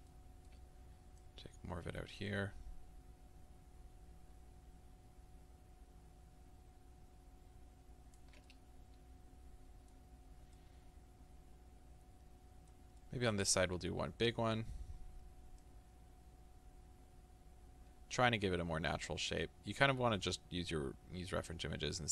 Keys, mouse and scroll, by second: 0.1-1.3 middle drag, 0.6-1.3 scroll up 2, 1.3-8.5 ctrl+drag, 8.5-15.8 middle drag, 10.2-10.6 scroll down 2, 14.2-15.6 scroll up 2, 15.6 scroll up 1, 15.8-22.1 ctrl+drag.